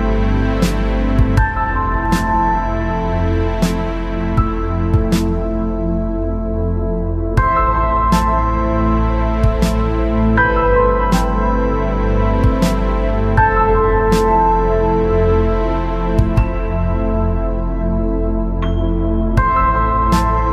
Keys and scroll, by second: 11.4 ctrl+z.